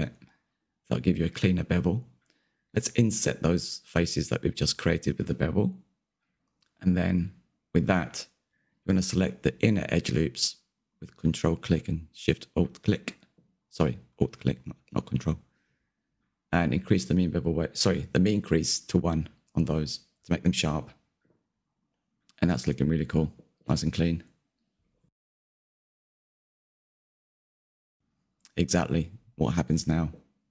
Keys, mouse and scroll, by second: 7.4-8.6 shift+middle drag, 8.6-9.3 scroll up 3, 9.3 shift+middle click, 10.1 2, 11.1 alt+click, 11.5-13.2 middle drag, 13.2 alt+shift+click, 14.2-17.5 drag, 17.5-18.1 scroll down 3, 18.1 Tab, 18.4-19.9 scroll down 3, 19.9 click, 20.7 click, 21.6-21.9 scroll down 2, 21.9-22.7 middle drag, 22.7-23.0 scroll down 2, 23.0-28.3 shift+middle drag, 28.3 click, 29.1 click, 30.0-30.5 middle drag.